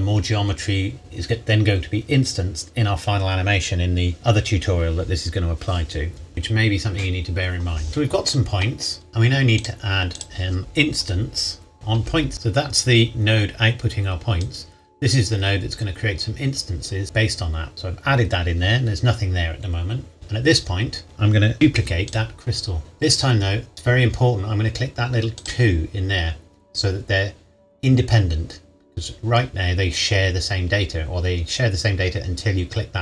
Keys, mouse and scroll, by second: 9.6 click, 10.6-12.2 typing, 12.3 click, 12.9-14.0 scroll down 1, 14.4 click, 14.7 click, 21.0 click, 21.5 shift+d, 22.1 click, 22.8-23.7 scroll up 1, 25.4 click.